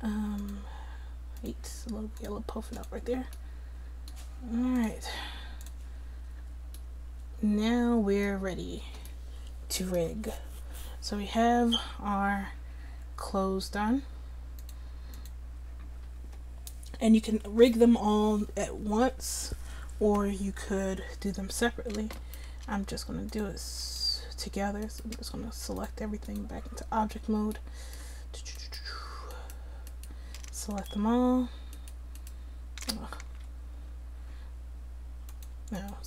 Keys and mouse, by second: 0.4-3.8 drag, 12.5 middle click, 13.9 middle click, 14.6 click, 22.2-23.3 drag, 24.0-25.8 drag, 26.6-32.2 drag, 33.3 a, 33.9-35.3 drag.